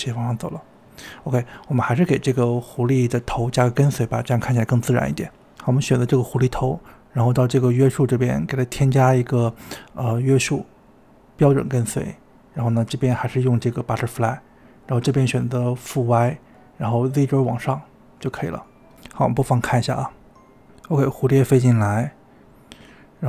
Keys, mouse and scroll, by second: 0.6 space, 1.6 space, 2.4 space, 5.9 click, 11.6-16.1 drag, 17.6 click, 18.2 click, 19.5 space.